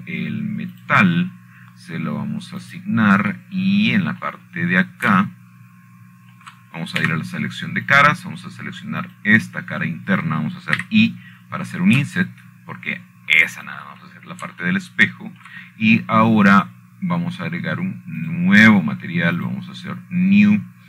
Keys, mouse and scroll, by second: 0.0 click, 1.3 click, 3.5 click, 5.3 click, 7.0 middle click, 7.3-8.2 scroll up 2, 7.4 middle click, 7.6-10.0 shift+middle drag, 10.6 click, 11.7 click, 16.2 shift+click, 16.9-17.8 scroll up 3, 18.2-19.2 shift+middle drag.